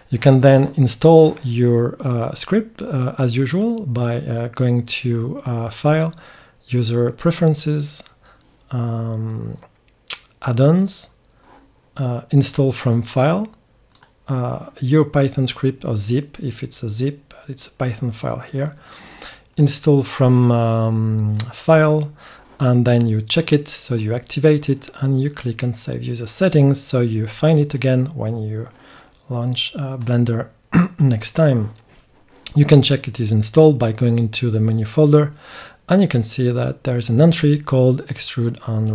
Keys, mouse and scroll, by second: 3.5-12.6 drag, 35.9-38.9 drag.